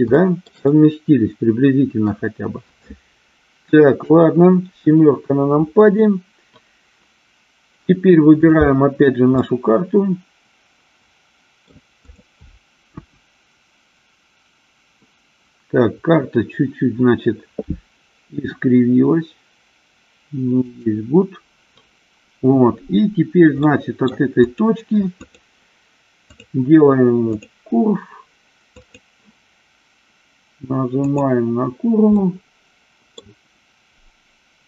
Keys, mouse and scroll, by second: 0.4-2.4 shift+middle drag, 4.3 KP_7, 8.6 click, 9.6-12.0 middle drag, 12.4 click, 13.3 KP_1, 18.6 r, 20.9 click, 23.9-24.4 middle drag, 24.8 click, 25.5 click, 26.6-27.8 drag, 29.2 click, 32.5 middle click.